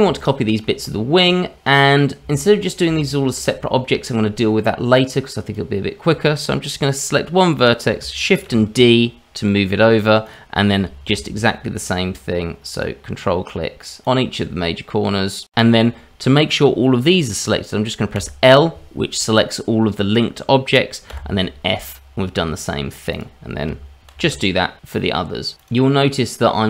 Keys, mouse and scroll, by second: 0.2 shift+middle click, 1.7-2.2 scroll up 2, 2.3 shift+middle click, 3.2 shift+middle click, 6.0 click, 8.5 shift+d, 11.9 ctrl+right click, 12.8 ctrl+right click, 14.0 ctrl+right click, 14.7 ctrl+right click, 18.1 l, 21.1 f, 23.1 click, 25.9 shift+d.